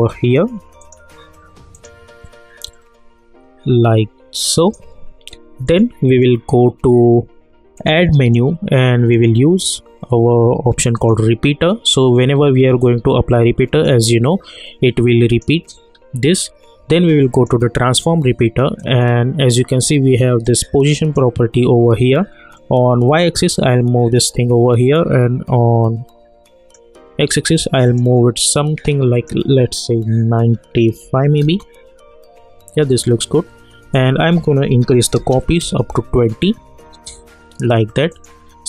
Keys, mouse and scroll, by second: 10.7 click, 15.3 click, 15.9 scroll down 1, 17.3-27.8 drag, 31.4 Return, 33.9 click, 35.6 Return, 38.1 click.